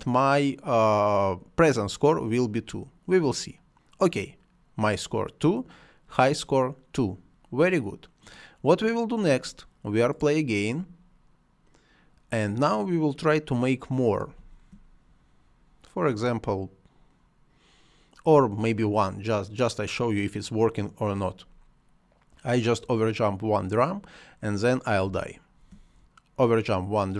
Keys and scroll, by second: 14.1 space, 18.0 space, 24.8 space.